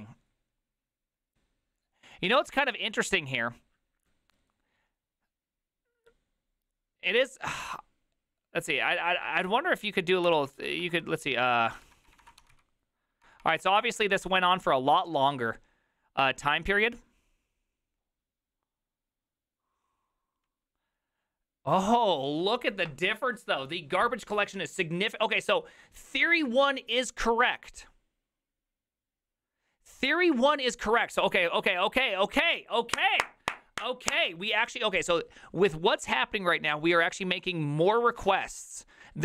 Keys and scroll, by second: 7.6 ctrl+f, 10.0-13.0 typing, 13.2 Return, 13.4 Return, 13.6 Return, 13.8 Return.